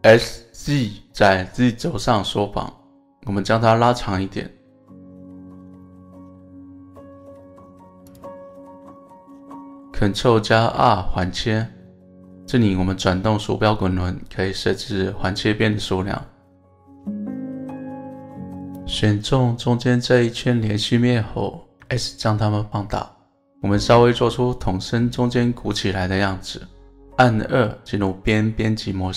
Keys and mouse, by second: 8.1 click, 10.6 ctrl+r, 18.6 right click, 26.5 click.